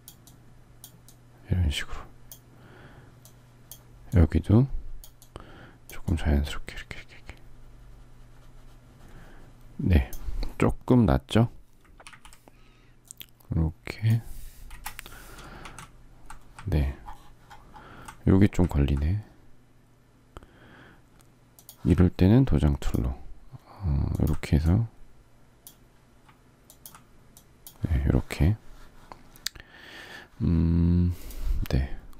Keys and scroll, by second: 11.8 ctrl+t, 14.4 Return, 15.3 z.